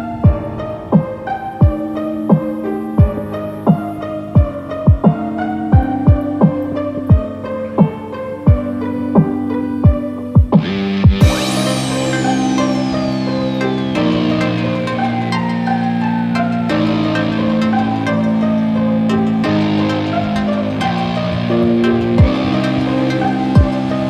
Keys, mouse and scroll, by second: 0.0 middle click, 0.9-1.2 scroll down 4, 1.4 scroll down 1, 1.6 middle click, 2.0 click, 3.2 click, 4.6 click, 6.8 click, 8.4 click, 15.3 scroll down 1, 15.7-16.0 scroll up 3, 16.0 middle click, 16.1 middle click, 17.5 middle click, 19.4 click, 19.9 click.